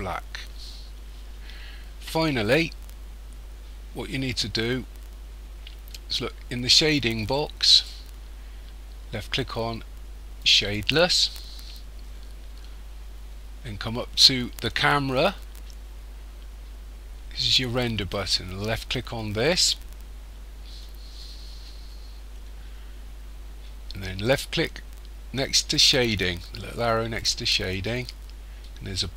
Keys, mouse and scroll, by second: 7.3 click, 7.8 click, 10.5 click, 18.9 click, 26.9-28.3 drag.